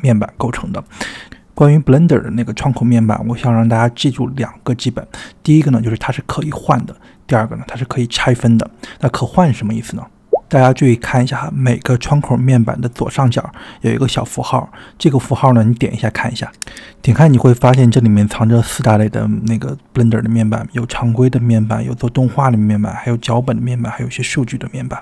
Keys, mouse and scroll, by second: 16.6-25.0 drag.